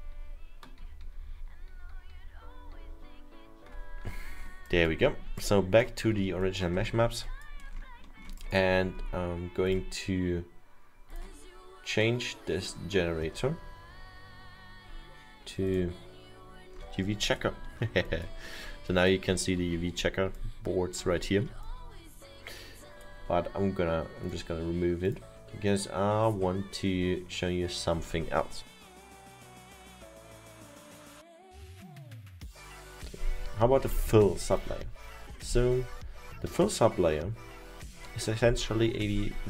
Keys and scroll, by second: 0.0 ctrl+z, 0.2 ctrl+z, 0.9 ctrl+z, 1.1 ctrl+z, 2.0 ctrl+z, 2.2 ctrl+z, 2.4 ctrl+z, 2.6 ctrl+z, 3.9 ctrl+z.